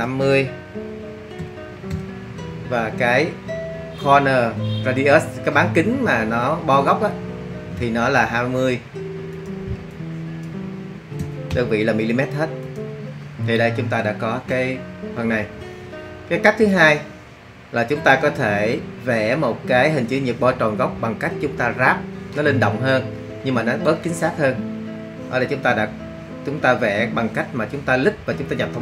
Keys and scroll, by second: 1.4 5, 1.9 0, 11.2 2, 11.5 0.